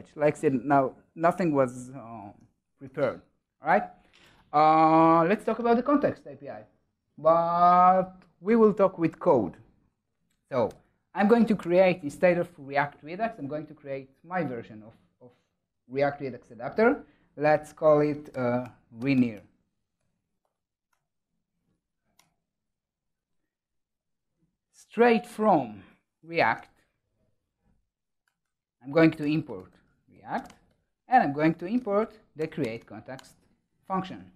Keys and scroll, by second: 2.8 super+s, 11.3 super+n, 25.2 Tab, 28.1 Tab, 32.3 Return.